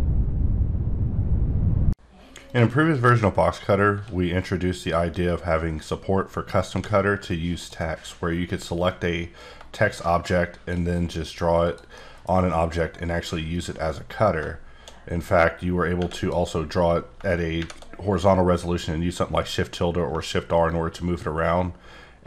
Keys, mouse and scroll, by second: 3.9 d, 4.7 click, 7.1 scroll up 3, 7.6 click, 8.9 click, 11.6 click, 11.9 middle click, 13.5-15.9 drag, 17.6 shift+`, 20.6 shift+Num_Lock, 20.7 shift+click.